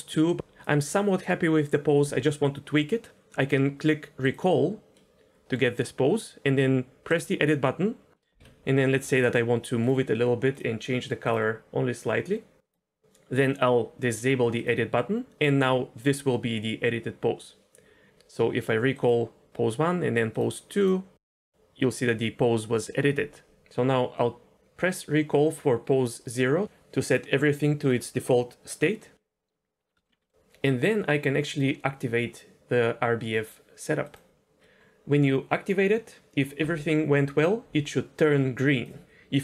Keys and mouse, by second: 4.9-5.6 middle drag, 7.1 click, 8.2 middle click, 8.4 KP_1, 9.0 g, 10.5 click, 14.6 click, 19.0 click, 20.8 click, 21.3 middle drag, 26.3 click, 30.0 shift+middle click, 30.2 middle click, 34.7 middle click, 38.2-38.8 drag.